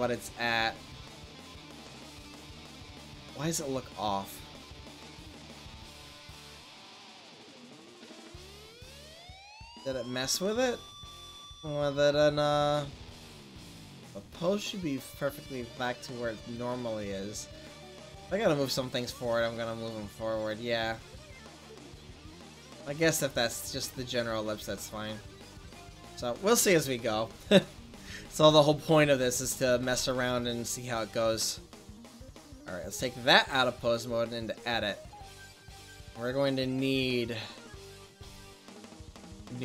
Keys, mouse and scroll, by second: 1.9 middle click, 2.8 middle click, 3.7 middle click, 4.5 middle click, 4.7 middle click, 4.9 middle click, 5.3 middle click, 18.4-18.8 middle drag, 20.4 click, 24.9 middle click, 29.2 ctrl+s, 31.5-33.2 right drag, 33.2 click, 34.2 click, 35.0 middle click, 37.3 middle click, 38.0 shift+a.